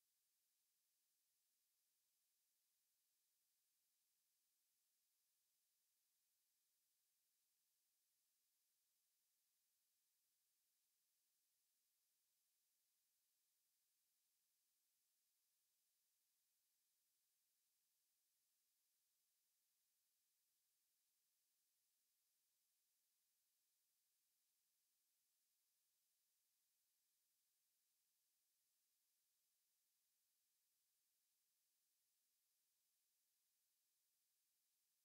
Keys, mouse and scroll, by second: 24.0-30.1 middle drag.